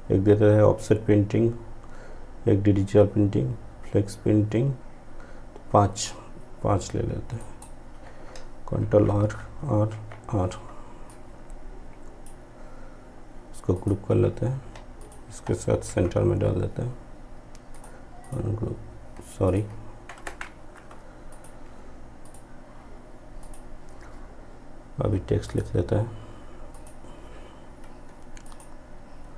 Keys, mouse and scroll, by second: 5.0-6.4 drag, 6.4 ctrl+right click, 7.8 ctrl+r, 10.1-12.7 drag, 14.0 shift+click, 14.8 e, 16.8 click, 19.4 shift+Page_Down, 20.3 click.